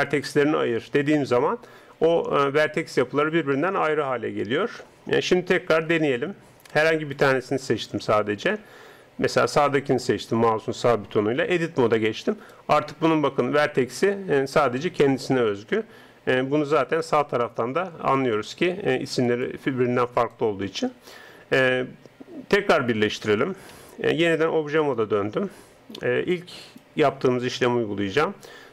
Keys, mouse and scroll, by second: 0.0-6.9 drag, 6.9 right click, 11.5 Tab, 12.2 right click, 16.7 Tab, 18.3-22.0 drag, 22.0 Tab, 23.8 Tab, 26.6 right click.